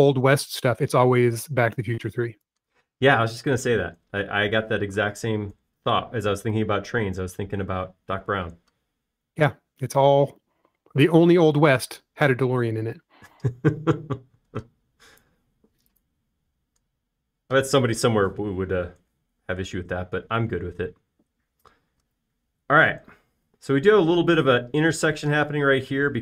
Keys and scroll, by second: 4.1 space, 6.5 s, 7.8 typing, 16.9 space.